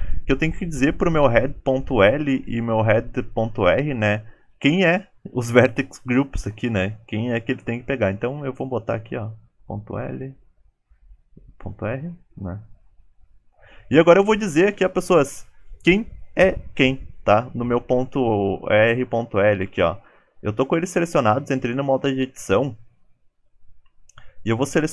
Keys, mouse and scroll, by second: 11.3 Down, 12.0 alt+Tab, 12.0 click, 12.1 alt+z, 13.3 scroll down 2, 23.7 click, 23.7 scroll down 2.